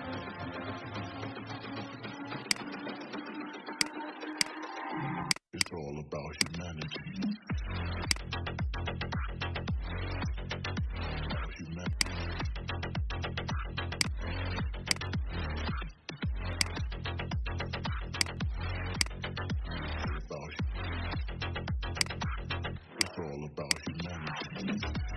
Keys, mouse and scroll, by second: 2.3 click, 10.4-10.7 alt+scroll up 1, 11.8 click, 21.9 click, 24.5 ctrl+f.